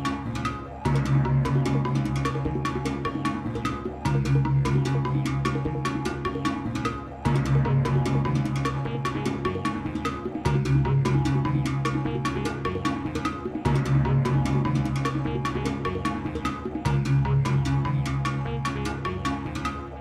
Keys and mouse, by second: 3.6 right click, 5.0-9.3 drag, 12.0 click, 13.4 x, 15.4 click.